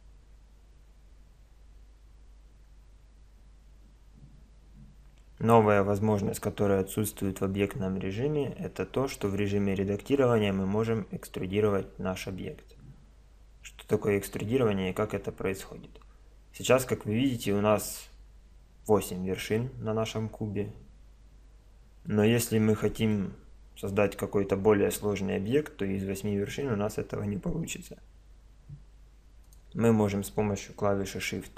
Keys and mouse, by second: 14.2-16.0 middle drag, 22.5-26.1 middle drag, 29.5-31.1 right drag.